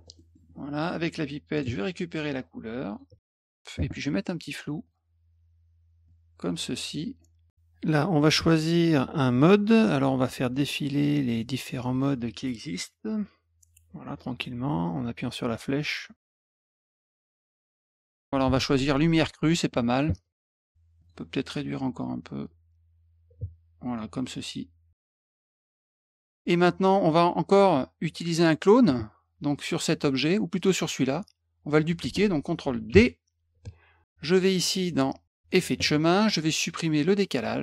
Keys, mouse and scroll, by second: 0.1 middle click, 1.5 click, 2.9 click, 4.8 click, 6.0-7.5 drag, 8.1-9.1 drag, 11.7-12.6 drag, 12.3 right click, 21.0 click, 22.4-23.9 drag, 24.9 click, 25.4 middle click, 28.4 click, 29.5 click, 30.6 click, 32.9 ctrl+d, 35.5 click.